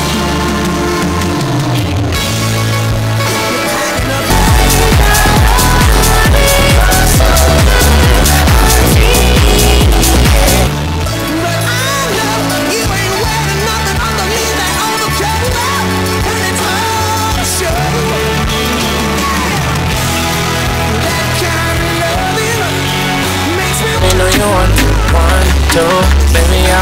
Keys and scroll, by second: 10.5 Page_Down.